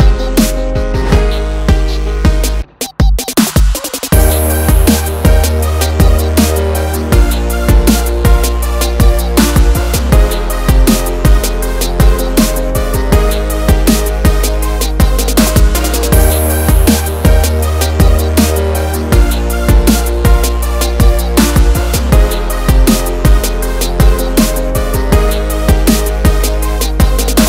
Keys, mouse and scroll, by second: 2.6 F9, 5.4 click, 6.8 ctrl+o, 8.1 scroll down 1, 12.4 click, 16.0 click, 18.2 click, 19.9 F4, 21.2 F9, 23.1 click, 25.7 scroll down 1.